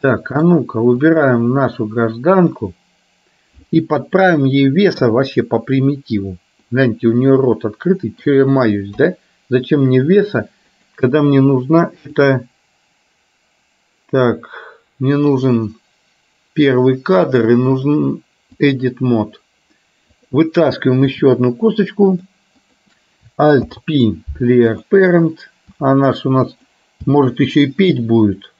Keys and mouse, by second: 0.2 middle click, 1.1 click, 5.1 KP_3, 6.9-8.4 middle drag, 9.0 KP_3, 10.9 click, 12.2-14.0 drag, 15.5 click, 18.0-19.0 drag, 20.4 click, 22.9 click, 23.7 alt+p, 25.9 r, 27.1 g.